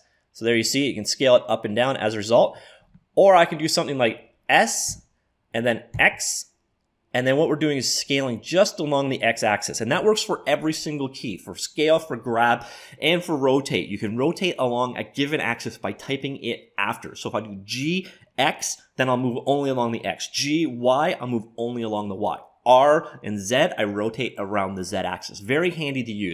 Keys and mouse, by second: 9.8 `.